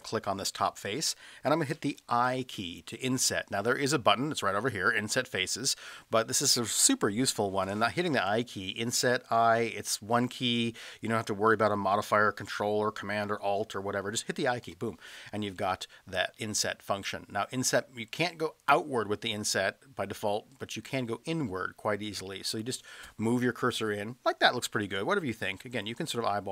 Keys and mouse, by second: 0.5-1.1 middle drag, 14.7 i.